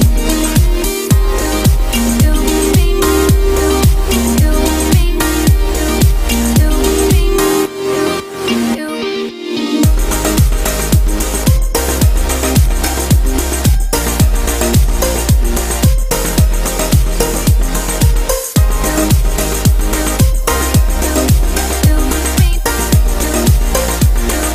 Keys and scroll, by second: 23.5 ctrl+i.